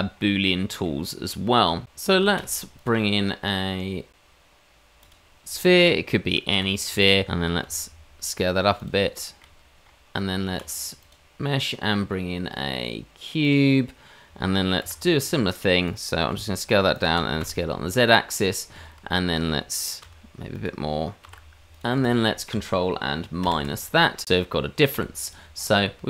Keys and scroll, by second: 2.3 shift+a, 6.5 g, 7.6 s, 10.5 shift+a, 14.8 g, 16.3 s, 17.1 s, 20.0 s, 21.2 g, 23.4 ctrl+KP_Subtract, 24.9 h.